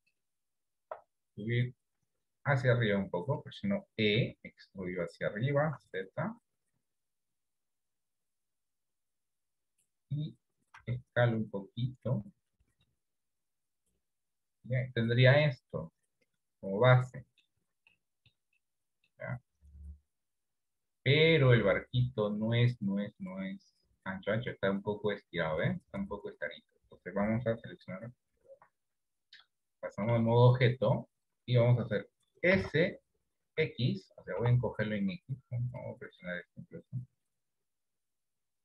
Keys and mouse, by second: 1.7-3.5 drag, 4.4 e, 11.0 s, 14.1-17.8 middle drag, 18.3 shift+middle click, 19.0 middle click, 20.4 KP_7, 22.6 click, 29.0 Tab, 29.9 shift+middle click, 32.8 s, 35.8 click, 37.8-38.6 drag.